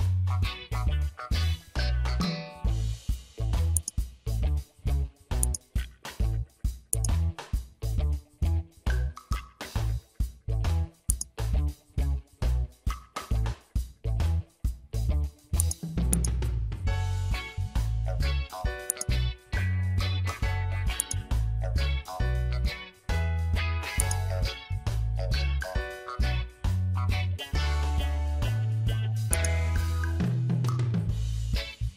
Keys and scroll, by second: 4.7 ctrl+z, 6.1 ctrl+z, 8.5 ctrl+z.